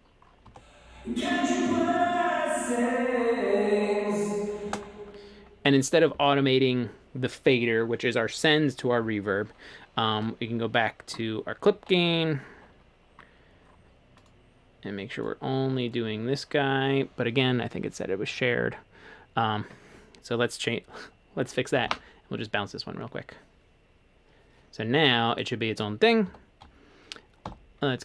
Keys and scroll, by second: 10.2 a, 21.9 super+b, 26.3 Escape, 27.5 5.